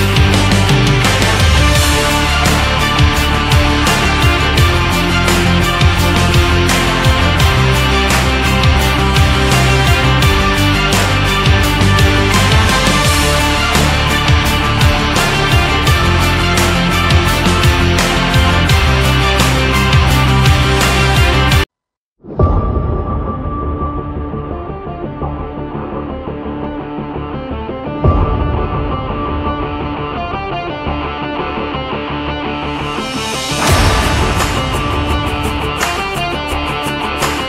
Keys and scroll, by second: 8.3 Up, 21.5 shift+Up, 22.4 Down, 24.0 Up, 27.1 Down, 27.9 Up, 29.6 Up, 30.0 Down, 35.3 Left.